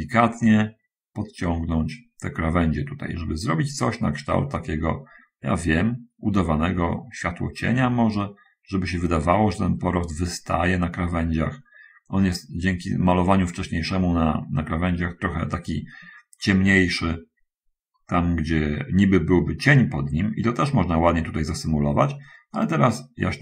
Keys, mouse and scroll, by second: 0.8-3.1 drag, 3.3-11.2 drag, 11.3-15.8 drag, 16.7-19.6 drag, 19.7-23.4 drag.